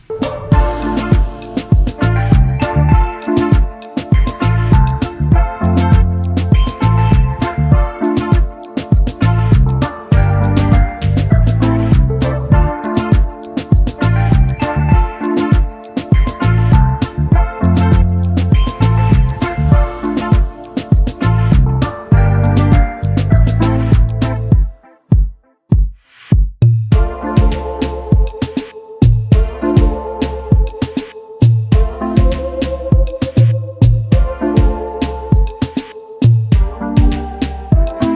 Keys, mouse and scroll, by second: 0.9 click, 1.0-1.7 typing, 5.4 alt+click, 12.0 space, 15.8 ctrl+shift+], 16.5-17.3 typing, 18.7 alt+scroll up 1, 19.6 alt+click, 24.8 alt+scroll down 1, 25.5 double click, 26.3 alt+scroll up 1, 26.8 space, 30.9 Down, 31.1 Down, 31.3 Down, 36.4 alt+click.